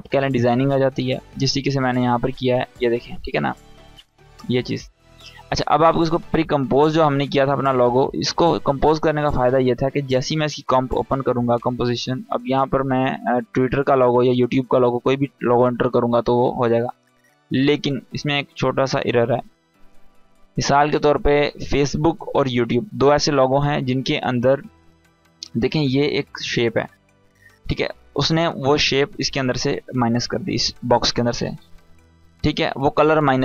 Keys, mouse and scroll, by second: 1.5 click, 2.5 scroll up 1, 2.9-4.6 typing, 2.9 click, 3.4 click, 3.8-4.1 scroll up 1, 4.2-4.8 click, 5.8 click, 10.7-15.0 drag, 28.8 click, 29.7 scroll up 1, 31.3 click.